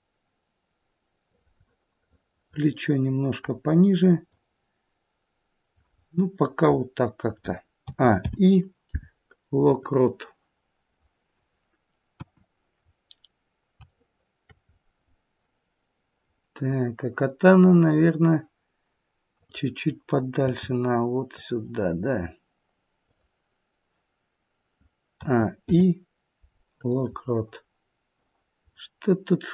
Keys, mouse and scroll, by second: 1.5 middle click, 3.6-4.2 scroll up 2, 4.2 middle click, 5.7-6.6 scroll down 3, 6.6-7.2 scroll down 1, 7.7 a, 8.1 i, 10.7 click, 12.0 KP_1, 12.8-13.8 scroll down 3, 13.8 shift+middle click, 14.6-15.2 scroll up 2, 15.9-16.9 scroll up 2, 16.9-18.1 scroll up 1, 18.1 click, 19.3 click, 20.4 g, 23.0 click, 25.1 a, 25.6 i, 28.7-29.5 scroll up 1.